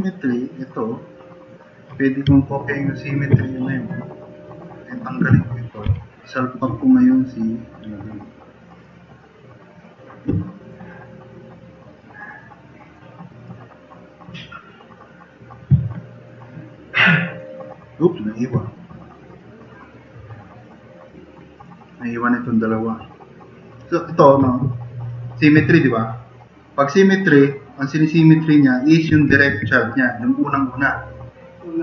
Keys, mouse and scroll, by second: 5.9 Delete.